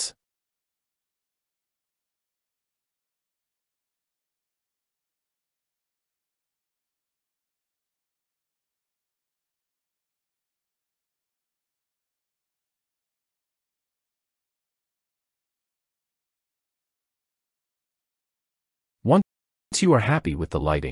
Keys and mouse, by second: 1.6-3.3 drag, 5.3-6.8 drag, 9.6 click, 11.0-12.7 drag, 13.1 click.